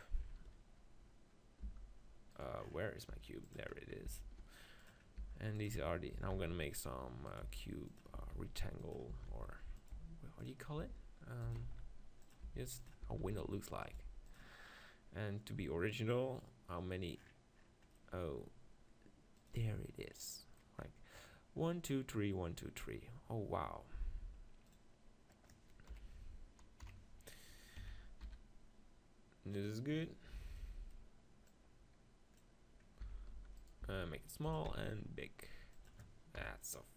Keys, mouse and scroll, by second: 1.6 g, 3.1 g, 4.1 s, 4.9-8.8 drag, 5.2 g, 5.7 s, 7.5-13.0 typing, 14.1 g, 17.3 click, 17.7-19.6 middle drag, 19.6-21.2 drag, 21.2-23.2 middle drag, 24.7-26.6 drag, 25.9 KP_1, 26.8 KP_7, 27.3-29.4 middle drag, 27.8 s, 29.6-33.5 drag, 30.6-33.0 middle drag, 33.0 s, 33.3 middle click, 33.7-35.4 right drag, 33.8 s, 34.5 s, 35.4 middle click, 35.9 click, 36.4 KP_1.